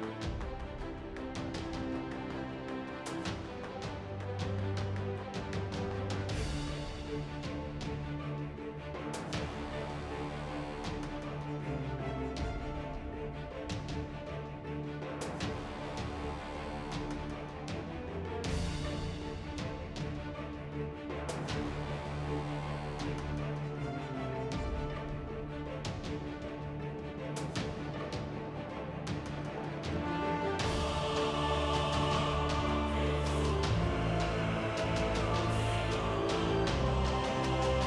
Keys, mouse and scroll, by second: 2.4 click, 2.9 z, 3.4 z, 3.7 z, 6.6 z, 7.6 ctrl+Tab, 8.4-11.9 typing, 9.7 Tab, 10.2 Tab, 11.1 ctrl+Tab, 12.7 ctrl+Tab, 13.3 g, 13.8 ctrl+Tab, 14.3 shift+right click, 14.7 i, 16.6-17.8 typing, 17.0 Tab, 18.5 ctrl+z, 20.6 middle click, 21.3-23.6 typing, 21.4 middle click, 22.9 Tab, 24.6 Tab, 25.2 z, 27.1 z, 27.4 z, 30.6 ctrl+Tab, 33.7 z, 34.3 z, 37.7 g.